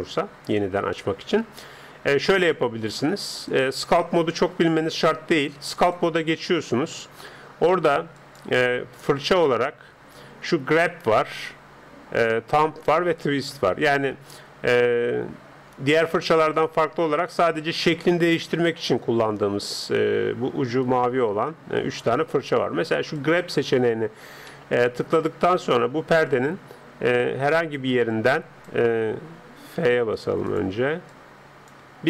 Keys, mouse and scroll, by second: 0.9-3.5 middle drag, 3.5-5.1 drag, 8.3-9.8 drag, 24.5-26.2 middle drag, 26.3-28.0 drag, 28.1-29.7 drag, 29.8 f, 31.1-32.0 drag, 31.9 Escape.